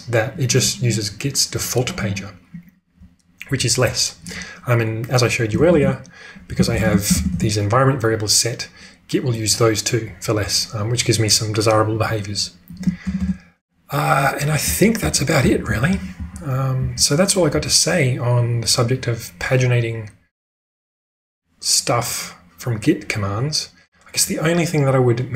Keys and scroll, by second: 5.6 ctrl+space, 6.2-7.1 typing, 7.3 Return, 13.0 ctrl+space, 14.6-17.5 typing.